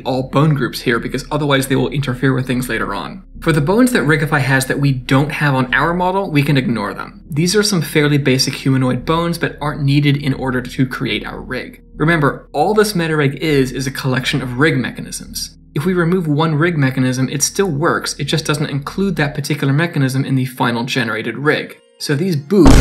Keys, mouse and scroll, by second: 0.5 Tab, 3.1 click, 3.1 middle click, 5.0 click, 6.4 click, 10.8 click, 14.1 ctrl+z, 16.1 d, 16.2 right click, 16.8 d, 20.9 scroll up 4, 21.1 shift+middle click, 21.2 middle click, 21.5 shift+scroll down 1, 21.8 middle click, 21.9 shift+middle click, 22.0 click, 22.3 click.